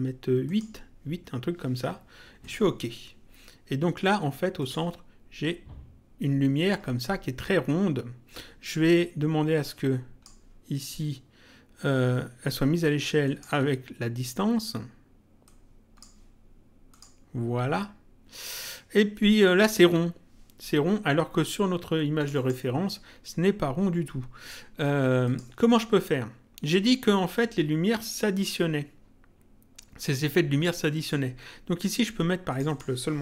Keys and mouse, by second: 0.4 click, 2.3 click, 4.5 click, 9.6 click, 13.2 click, 15.4 click, 16.8 click, 22.1 click, 25.2 click, 30.2 click, 32.4 click.